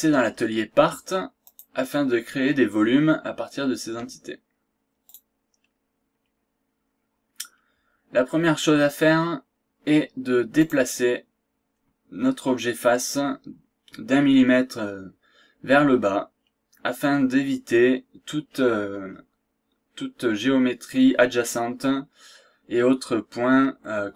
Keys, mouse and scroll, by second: 1.4 click, 5.0 click, 6.0-6.4 scroll down 1, 6.4 scroll up 1, 7.1 scroll up 1, 7.6-8.0 scroll down 1, 8.0 scroll up 1, 10.6 click, 16.2 scroll down 1, 16.5-16.8 scroll up 1, 17.3 scroll up 1, 17.7 scroll down 1, 19.1 scroll down 1, 19.4-19.8 scroll up 1, 20.3 scroll down 2, 20.8 scroll up 2, 22.4 scroll down 2, 22.6-23.0 scroll up 2, 23.5 scroll down 2, 23.8-24.1 scroll up 1.